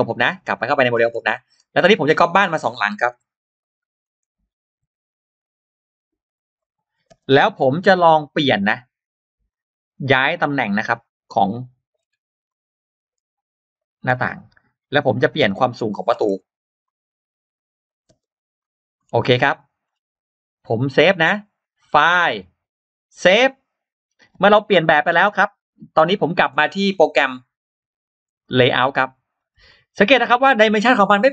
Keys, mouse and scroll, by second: 0.3 click, 0.9-1.3 scroll down 1, 1.2 middle click, 1.9 middle click, 2.1-2.7 scroll down 1, 2.6 middle click, 2.8-3.1 scroll up 1, 3.1 m, 3.4 click, 3.9-4.2 scroll down 1, 6.4 click, 7.0 click, 7.0 space, 7.0 m, 7.3-7.7 scroll up 1, 7.5 middle click, 7.9-8.3 scroll down 1, 8.3 scroll up 1, 9.3 click, 9.5 click, 9.9 click, 10.8 click, 12.3 click, 12.3 m, 13.6 click, 14.8 click, 14.8 space, 14.8 m, 15.9 middle click, 16.2 m, 16.7 click, 16.7 m, 16.7 space, 17.7 click, 18.3 click, 18.3 space, 18.3 m, 18.8-19.1 scroll down 1, 19.4 click, 19.7 scroll down 1, 20.1 scroll up 1, 21.4 click, 22.9 click, 28.2 click, 29.2-29.6 scroll down 1, 30.2 scroll down 2.